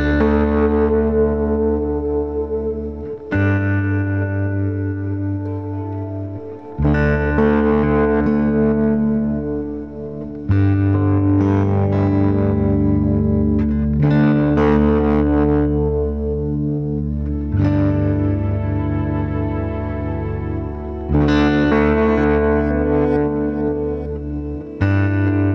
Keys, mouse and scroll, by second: 1.6 click, 2.4-2.9 scroll up 1, 2.9 g, 4.4-5.5 middle drag, 5.5 g, 8.6-9.4 scroll down 1, 9.4-10.0 scroll down 3, 10.0-11.2 drag, 11.2 g, 12.7 middle click, 13.5 scroll down 1, 13.6 click, 14.1 middle click, 14.8 scroll up 1, 15.0 middle click, 15.6 click, 16.2 g, 17.9-20.6 middle drag, 20.6 click, 21.3 middle click, 22.3 g, 24.3 click, 24.6 middle click, 25.3-25.5 scroll down 1.